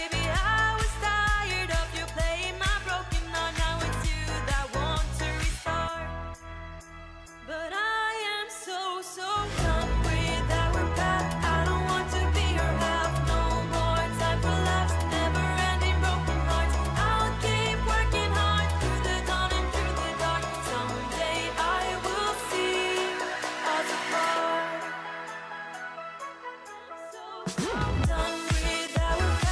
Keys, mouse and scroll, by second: 17.7 ctrl+click, 18.9 ctrl+e.